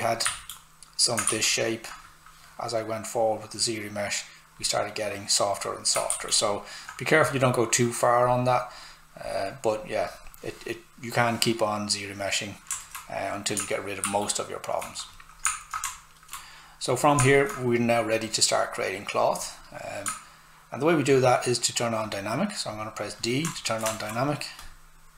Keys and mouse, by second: 0.3 d, 1.3 shift+f, 3.2 click, 6.1 shift+f, 8.2 click, 12.7 alt+click, 12.8 alt+right click, 14.0 shift+f, 15.1 click, 15.9 alt+right click, 17.2 click, 23.5 alt+right click, 24.6 click.